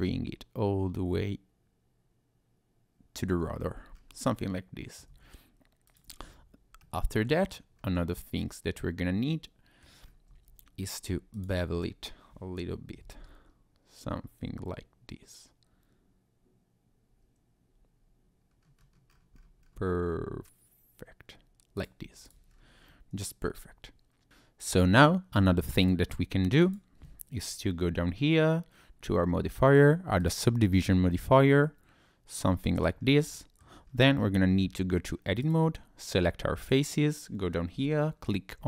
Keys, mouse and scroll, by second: 3.5 Tab, 3.9-4.4 scroll up 1, 4.4 middle click, 5.1 Tab, 5.9 click, 6.2 Tab, 6.8 middle click, 7.8-8.1 scroll up 1, 8.1-8.4 scroll down 1, 8.7 middle click, 10.0 scroll up 2, 10.8 Tab, 10.8 scroll down 1, 11.3 alt+click, 13.0 ctrl+b, 17.8-18.3 scroll up 1, 18.3-19.1 scroll down 4, 19.1-20.3 scroll up 4, 21.4-21.8 scroll up 1, 21.8 click, 22.0 Tab, 22.2 click, 22.5 scroll down 2, 22.9 middle click, 25.8 click, 26.6 click, 31.1 middle click, 33.0-33.3 scroll up 2, 33.3 middle click, 33.7 scroll down 1, 33.9 Tab, 35.4 click, 36.6 click.